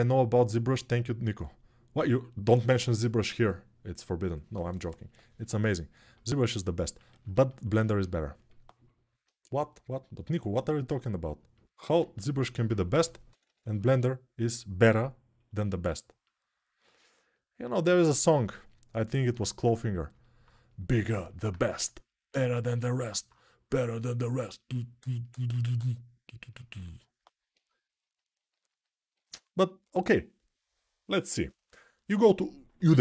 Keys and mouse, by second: 11.8 alt+q, 12.6-13.6 typing, 29.0 alt+q.